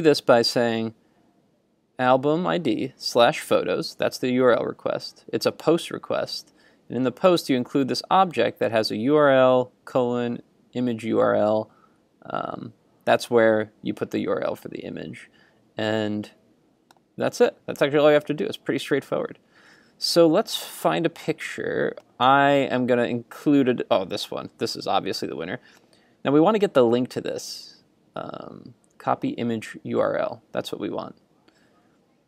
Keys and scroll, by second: 18.3 super+Tab, 20.7 super+Tab.